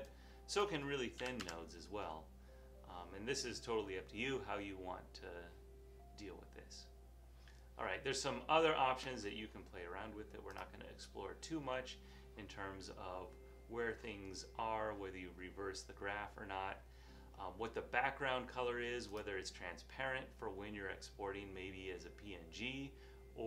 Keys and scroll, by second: 1.3 5, 1.5 Home.